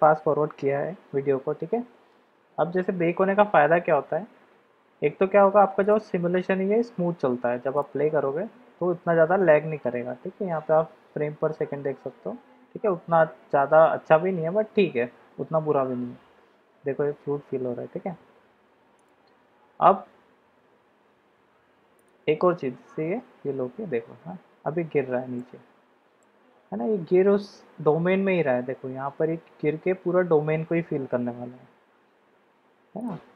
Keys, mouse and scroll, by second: 5.8 click, 7.7 click, 19.2-22.2 drag, 25.6-26.4 middle drag.